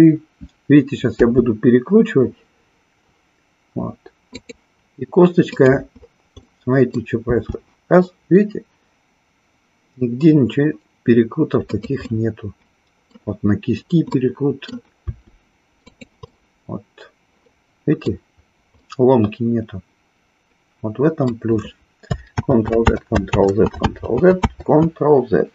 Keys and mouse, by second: 1.1 r, 4.3-4.7 drag, 5.5 click, 6.5 middle click, 7.3 r, 11.8 click, 12.1-13.1 middle drag, 14.1 middle click, 15.0 r, 15.9 click, 16.2-18.0 middle drag, 18.8-21.2 middle drag, 22.3 ctrl+z, 22.9 ctrl+z, 23.9 ctrl+z.